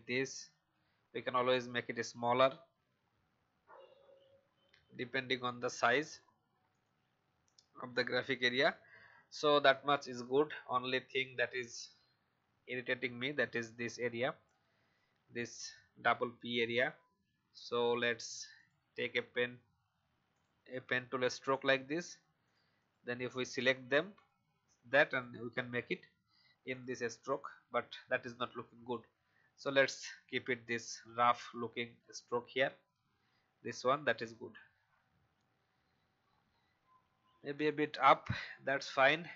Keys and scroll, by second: 22.0 shift+v, 37.1 Up.